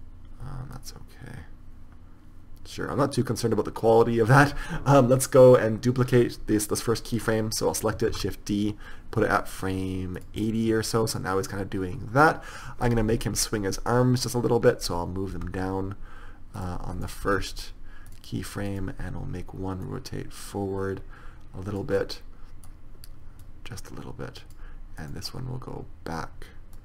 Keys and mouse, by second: 8.5 shift+d, 10.7 click, 15.7 r, 17.6 r, 21.1-22.1 drag, 22.3-23.8 middle drag, 23.8-26.8 drag, 25.3-26.8 right drag.